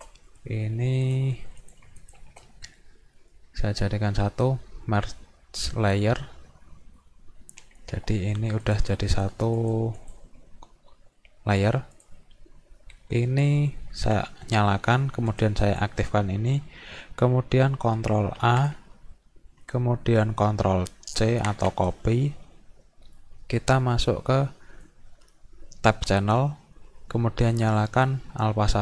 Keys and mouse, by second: 0.3 right click, 1.1 click, 1.6 click, 2.0 shift+click, 3.2 right click, 5.7 click, 8.6 click, 9.1 click, 9.6 click, 10.0 click, 11.6 click, 12.0 click, 15.3 click, 15.7 click, 18.4 ctrl+a, 21.2 ctrl+c, 24.9 click, 27.8 click.